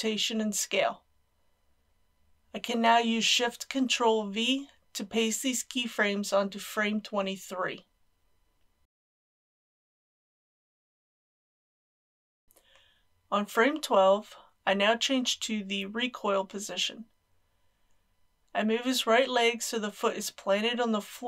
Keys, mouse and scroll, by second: 1.1 ctrl+c, 3.4-5.1 drag, 5.5 Right, 6.9 ctrl+shift+v, 8.9-14.1 drag, 17.5 shift+middle click, 19.9 click.